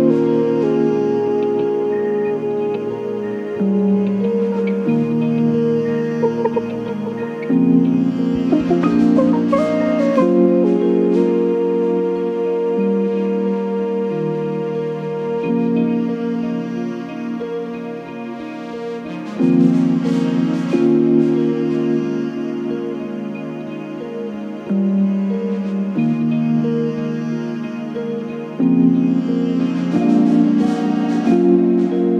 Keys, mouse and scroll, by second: 3.0 click, 3.6 click, 4.4-4.9 ctrl+scroll up 4, 10.3-10.6 ctrl+shift+scroll up 3, 13.1 click, 15.5-18.5 ctrl+shift+drag, 20.2-20.5 ctrl+scroll down 2, 20.9 ctrl+space, 22.0 ctrl+d, 23.0 click, 24.0-26.3 drag, 26.4 click, 28.2 click, 29.5 click, 30.7 click.